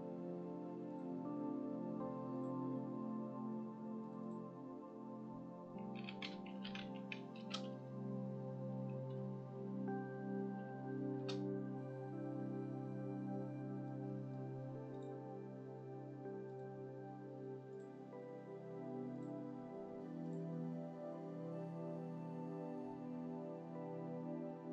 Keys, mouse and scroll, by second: 0.8 click, 2.3 click, 4.0 click, 4.2-11.2 drag, 13.8 middle click, 14.4-14.9 scroll up 1, 14.9 click, 16.4 click, 17.7-19.2 drag, 20.2 click.